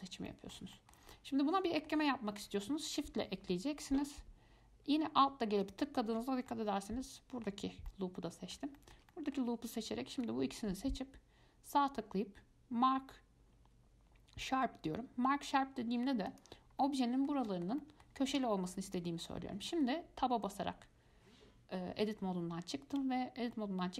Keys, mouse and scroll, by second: 0.1-0.5 scroll down 2, 0.5-2.4 middle drag, 2.4-3.8 scroll up 1, 3.8-4.5 scroll up 1, 4.5-5.1 scroll up 1, 5.1 scroll up 1, 5.8 alt+shift+click, 6.7-7.9 middle drag, 7.9 scroll down 1, 8.1-10.3 middle drag, 10.3-17.0 right drag, 17.0-18.5 middle drag, 18.5 Tab, 19.1 click, 19.5-22.5 middle drag.